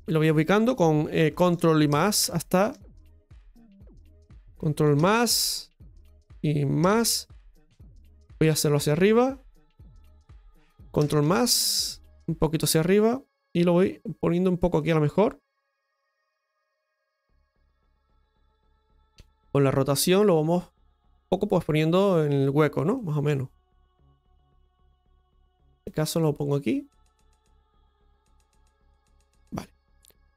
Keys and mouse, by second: 1.9 ctrl+KP_Add, 3.5-8.0 middle drag, 5.3 ctrl+KP_Add, 7.0 ctrl+KP_Add, 9.0-10.9 drag, 10.9 ctrl+KP_Add, 12.0-15.4 drag, 15.4-20.7 middle drag, 21.2-22.6 drag, 22.9 middle click, 23.8-25.8 drag, 26.1-29.3 middle drag.